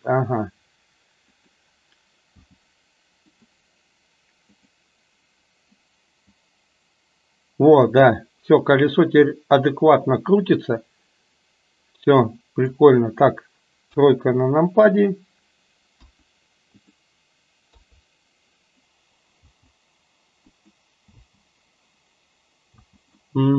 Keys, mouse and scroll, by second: 1.3 click, 2.5 g, 4.6 click, 6.3-12.8 drag, 13.8 KP_3, 16.0 KP_1, 16.8 click, 17.8 KP_3, 19.4 b, 21.2 space, 22.8 space, 23.2-23.5 middle drag.